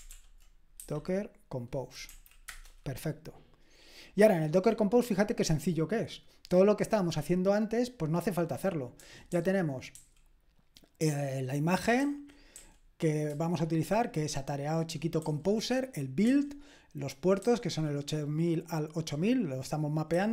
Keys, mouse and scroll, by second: 0.0-0.8 typing, 2.4 Return, 9.3-9.9 typing, 12.3-15.2 typing, 16.2 typing, 17.4 typing.